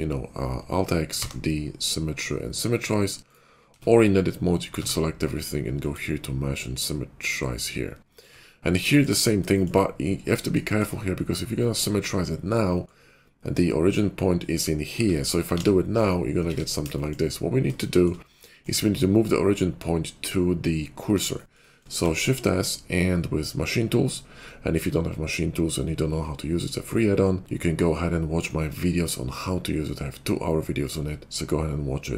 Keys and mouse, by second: 3.6 Tab, 4.7 a, 9.1-11.6 middle drag, 15.5 alt+x, 16.4 ctrl+z, 16.9 shift+middle click, 17.1 click, 17.7 shift+middle click, 17.8 shift+click, 21.8 shift+s, 22.1-29.4 shift+drag, 29.4 shift+middle click, 31.9 shift+click.